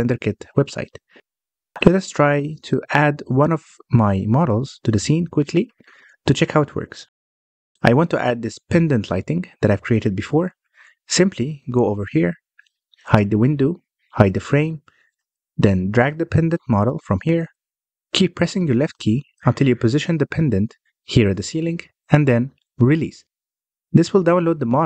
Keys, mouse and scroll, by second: 6.8-7.5 scroll up 3, 7.5 scroll down 1, 7.6-9.0 middle drag, 9.0 click, 14.1 h, 14.4 click, 14.7 h, 15.2-16.1 middle drag, 16.1 scroll up 1, 16.3-19.3 middle drag.